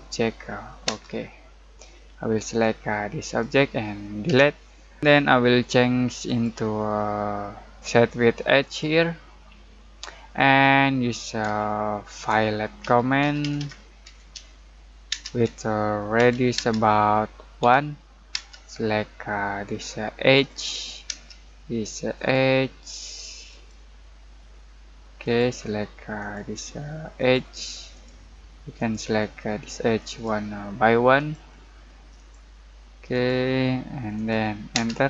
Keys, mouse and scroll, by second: 0.8 space, 1.5-2.4 scroll down 1, 2.4 click, 4.2 Delete, 6.2 click, 8.4 typing, 8.6 click, 9.6 middle click, 10.1-11.4 scroll up 1, 11.6 shift+middle click, 12.8-16.5 typing, 17.6 1, 18.3 space, 18.9-20.3 scroll up 1, 20.3 click, 21.1-22.6 typing, 22.1 click, 34.7 space.